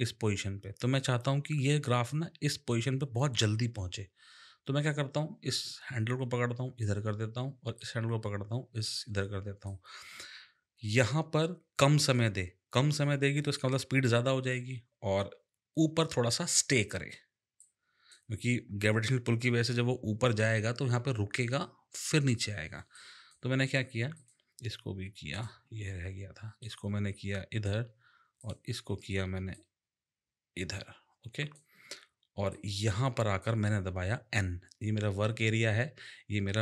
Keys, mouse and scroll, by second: 4.8 click, 7.8 click, 17.6 click, 22.9 click, 24.2 click, 25.3 click, 26.6 click, 28.4 click, 29.5 click, 32.5 click.